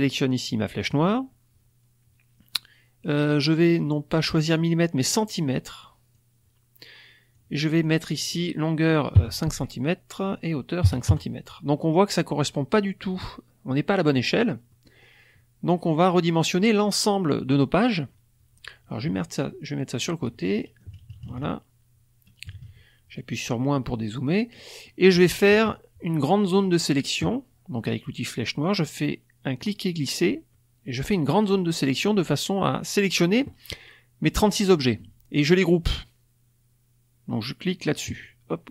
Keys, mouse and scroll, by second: 0.7 click, 4.5-6.3 drag, 7.3 click, 9.1 KP_5, 9.4 Tab, 10.8 KP_5, 11.0 KP_Enter, 12.1-14.3 drag, 14.6-16.0 middle drag, 19.2-20.4 drag, 20.9 KP_Subtract, 22.4 KP_Subtract, 23.4 click, 24.5 click, 25.5 KP_Subtract, 26.2 click, 29.5-31.6 drag, 38.0 click.